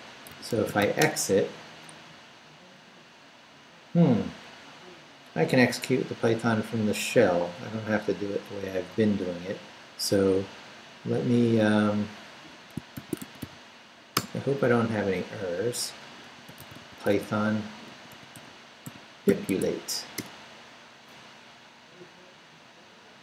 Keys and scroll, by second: 0.1-1.3 typing, 12.7-13.9 typing, 14.1 Return, 16.0-19.8 typing, 20.2 Return.